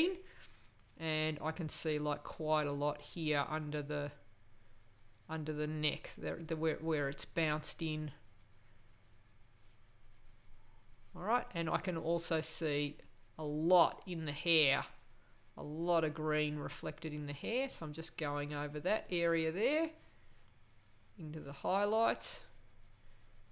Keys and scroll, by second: 0.0 space, 19.0 space.